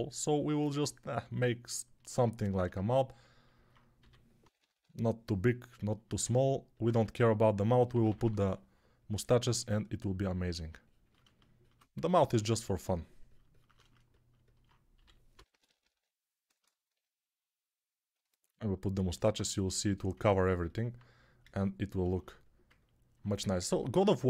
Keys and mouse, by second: 3.9-4.7 typing, 6.8 1, 7.8 [, 8.0 [, 8.1 [, 11.8 2, 14.8-15.8 typing, 20.0-23.5 ctrl+alt+drag, 20.0-23.5 ctrl+alt+middle drag, 20.0-23.5 ctrl+alt+right drag.